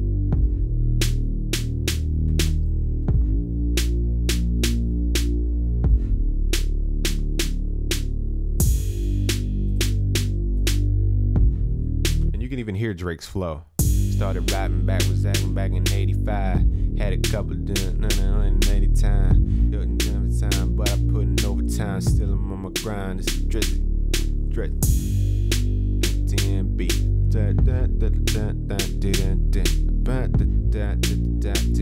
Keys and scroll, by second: 12.7 ctrl+s.